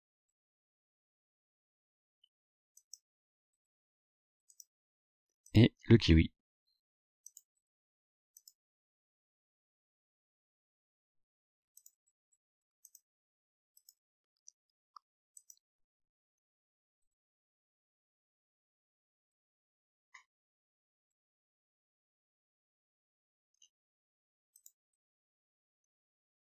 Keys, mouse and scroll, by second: 2.8 click, 3.6 scroll down 1, 4.6 click, 5.5 click, 7.3 click, 8.4 click, 11.8 click, 12.9 click, 13.8 click, 15.4 click, 24.7 click, 26.2 scroll down 2.